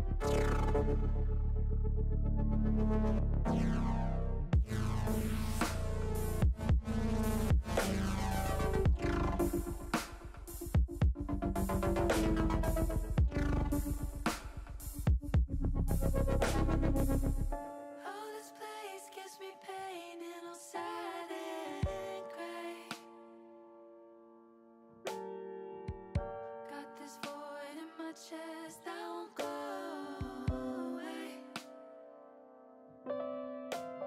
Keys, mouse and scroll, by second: 1.9 click, 3.3 click, 7.8 click, 8.2 click, 9.5 click, 10.5 click, 11.1 click, 11.9 click, 17.5 l, 25.8 p, 30.5 Tab.